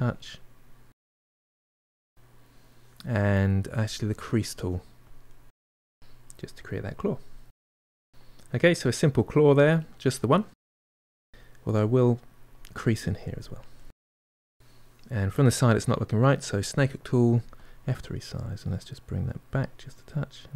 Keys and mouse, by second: 1.0 click, 1.3-3.3 middle drag, 3.3 click, 3.9 f, 4.4 middle click, 4.9-7.1 ctrl+drag, 7.1 middle click, 7.6 click, 8.3-12.0 ctrl+middle drag, 12.0 click, 12.8-15.7 middle drag, 15.7 click, 16.2 f, 17.1-20.0 drag, 20.0-20.5 middle drag.